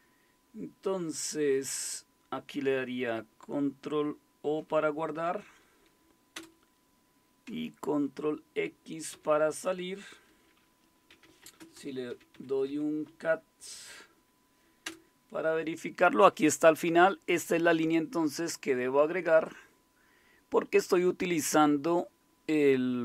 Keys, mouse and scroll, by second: 5.1 ctrl+o, 6.3 Return, 9.1 ctrl+x, 10.9-13.3 typing, 14.8 Return, 19.4-22.3 drag.